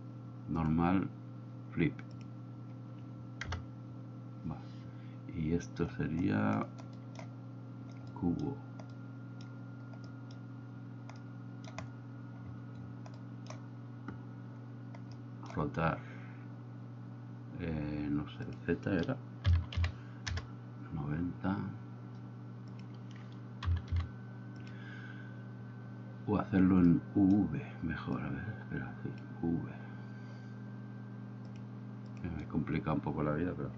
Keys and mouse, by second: 3.6 KP_0, 8.3 middle click, 9.1 middle click, 10.1 middle click, 11.3 middle click, 13.4 middle click, 15.2 middle click, 18.5-21.3 drag, 22.8-24.9 drag, 27.2 middle click, 28.4-29.4 drag, 31.6-32.3 drag.